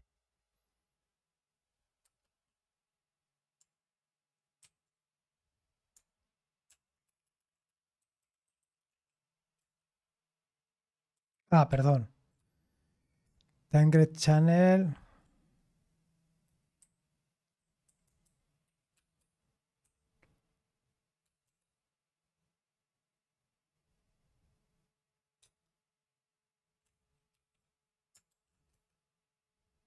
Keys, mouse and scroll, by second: 4.6 ctrl+c, 6.7 ctrl+p, 7.1-9.4 typing, 9.6 Return, 11.3 ctrl+c, 21.4 space, 27.3 ctrl+e, 28.3 shift+8, 28.7 Return.